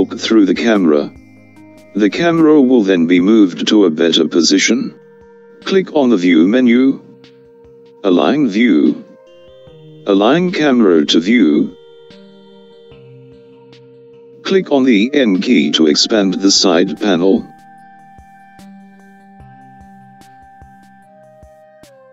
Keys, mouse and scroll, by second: 5.1-8.2 drag, 18.3 n.